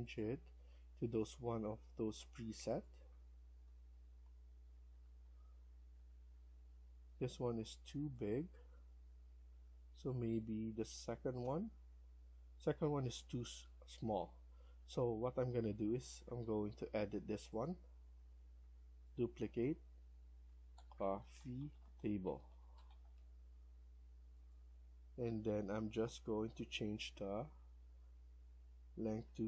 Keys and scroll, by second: 1.8 Escape, 3.5 Right, 3.7 Right, 4.0 Right, 4.1 Down, 5.1 Down, 5.1 Up, 5.4 Down, 9.3 Up, 9.3 Escape, 14.0 ctrl+z, 15.0 Escape, 20.1-23.1 typing, 28.7-29.4 typing.